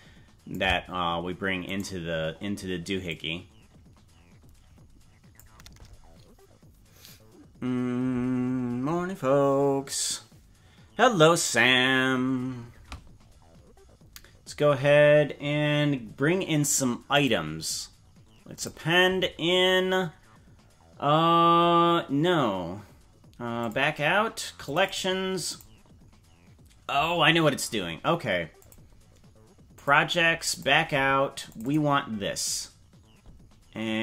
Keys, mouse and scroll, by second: 1.7 right click, 3.1-5.4 drag, 17.1-18.7 drag.